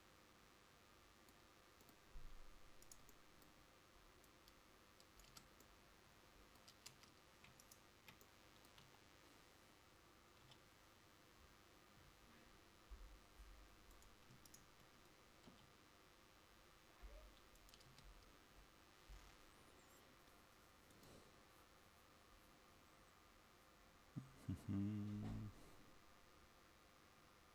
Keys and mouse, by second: 3.4 click, 5.4 Tab, 7.0 Tab, 8.9 KP_1, 10.6 g, 15.7 g, 18.0 Tab.